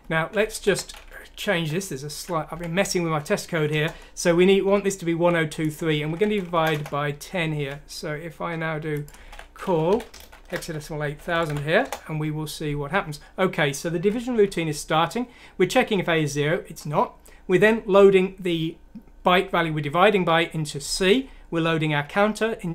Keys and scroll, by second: 0.6 shift+End, 1.5 3, 2.5 F9, 3.6 Return, 5.7-6.5 typing, 9.1-11.8 typing, 14.4 F7, 16.0 F7, 20.8 F7.